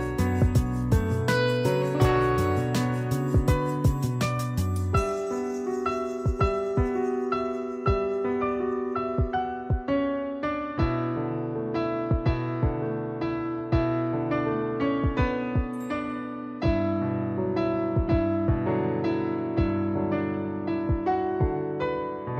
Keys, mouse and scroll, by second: 4.1 click, 4.4 click, 6.3 z, 6.6 click, 11.3 space, 11.4 click, 11.8 space, 12.0 click, 12.2 space, 12.5 click, 12.7 space, 15.2 click, 20.4 click.